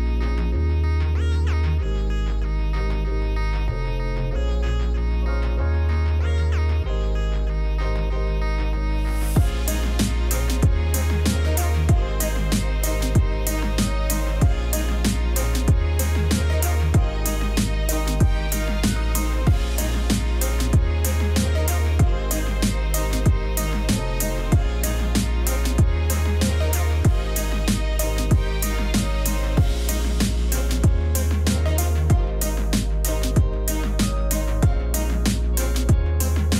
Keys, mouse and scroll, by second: 0.0-1.6 typing, 0.1 click, 0.7 click, 1.2 click, 2.9 ctrl+z, 3.0-14.6 typing, 3.7 ctrl+z, 5.9 click, 6.8 shift+click, 7.1 click, 14.0 scroll, 24.4 Return, 25.0 m, 26.9 c, 31.7 Return, 36.2 v.